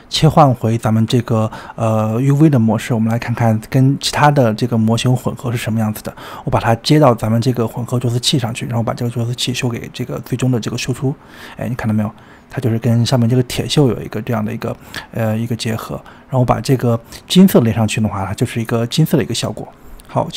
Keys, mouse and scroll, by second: 0.0-1.0 middle drag, 1.0-2.3 scroll down 23, 1.2 middle click, 1.8 middle click, 2.3 shift+middle click, 2.6-3.8 scroll up 12, 3.8 click, 8.5 click, 11.6-14.6 middle drag, 14.6 click, 15.7-16.6 scroll down 15, 15.9 shift+middle click, 16.6-17.2 scroll up 8, 17.2 click, 19.3-20.3 middle drag.